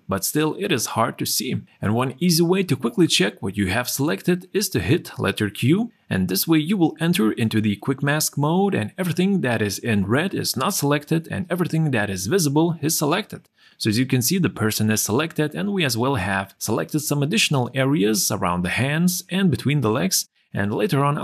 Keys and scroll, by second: 6.2 q.